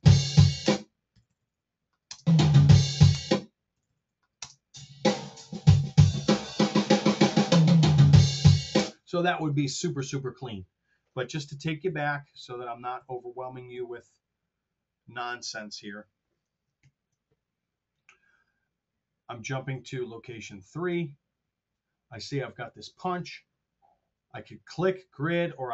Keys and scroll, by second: 1.0 r, 2.1 space, 3.2 space, 3.7 r, 4.3 space, 8.8 space, 11.4 super+z, 16.7 ctrl+super+Down.